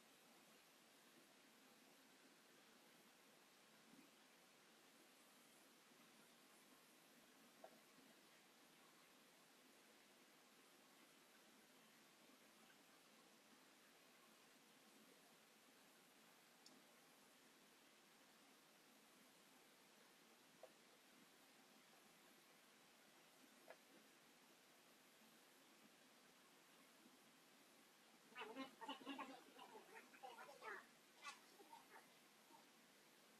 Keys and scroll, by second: 0.3 Delete, 1.5 p, 2.5 space, 4.7 k, 8.2 space, 9.8 m, 11.6 space, 13.9 Delete, 21.4 space, 22.1 Escape.